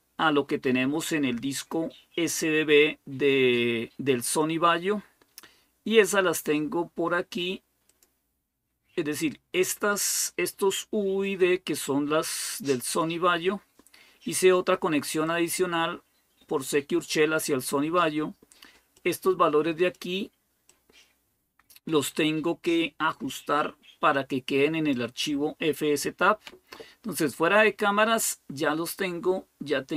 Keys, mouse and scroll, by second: 7.7-17.2 drag, 18.7-19.8 drag, 20.5-22.0 drag, 22.9-25.0 drag, 29.7 click.